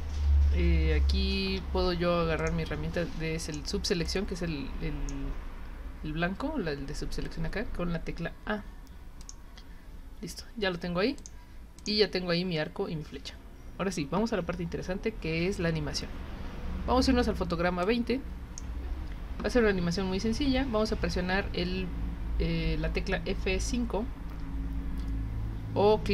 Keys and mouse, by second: 2.4 click, 3.4 click, 4.0-5.1 drag, 9.2 click, 11.2 click, 11.8 click, 17.8-18.6 drag, 24.3 F5.